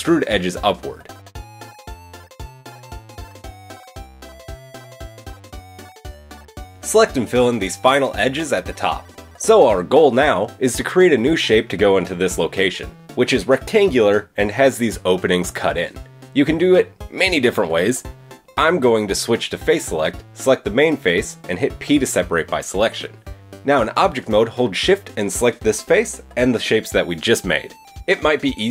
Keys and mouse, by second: 0.0 e, 0.7 g, 1.5-4.5 drag, 7.3 click, 7.7 shift+click, 8.8 f, 9.1-11.1 shift+drag, 9.7 f, 11.1-12.6 middle drag, 12.4 Tab, 12.7-19.3 middle drag, 12.9 Tab, 19.3-22.9 drag, 19.9 middle click, 19.9 right click, 21.3 p, 22.5 Tab, 22.6 Tab, 23.1 Tab, 23.5 click, 25.1 shift+click, 26.4 shift+click, 26.4 shift+middle click, 26.4 shift+right click, 26.9 click, 26.9 middle click, 26.9 right click, 27.8 click, 27.8 middle click, 27.8 right click, 28.6 click.